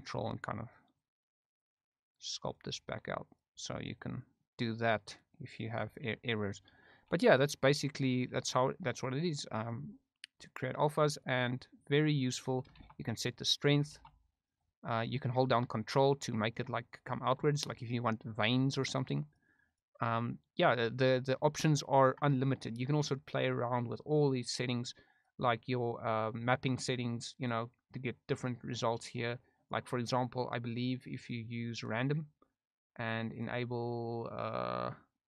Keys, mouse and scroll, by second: 0.5 ctrl+click, 0.9 ctrl+click, 1.4 ctrl+click, 1.9 ctrl+click, 2.4 ctrl+click, 2.8 ctrl+click, 3.2 ctrl+click, 3.6 ctrl+click, 4.0 ctrl+click, 4.6 ctrl+click, 5.0 ctrl+click, 5.4 ctrl+click, 6.1 middle click, 8.4 middle click, 9.0 click, 9.9 middle click, 10.4 click, 10.7 click, 11.0 click, 11.7 middle click, 12.8 shift+f, 14.0 shift+f, 14.6 click, 15.8 ctrl+click, 16.8 middle click, 17.4 shift+middle click, 18.7 ctrl+click, 19.2 ctrl+click, 19.6 ctrl+click, 20.4 middle click, 21.5 ctrl+click, 27.4-28.5 drag, 29.7-31.9 drag, 33.0 click, 33.3 click.